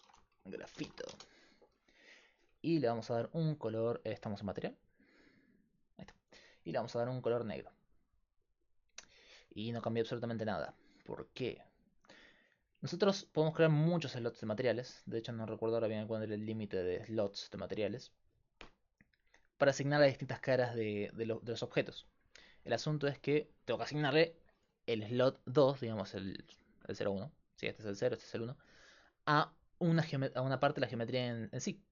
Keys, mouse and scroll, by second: 0.0 shift+BackSpace, 3.0-9.0 drag, 13.7-21.2 drag, 21.2-22.7 middle drag, 22.7-25.0 right drag, 27.7-30.3 drag.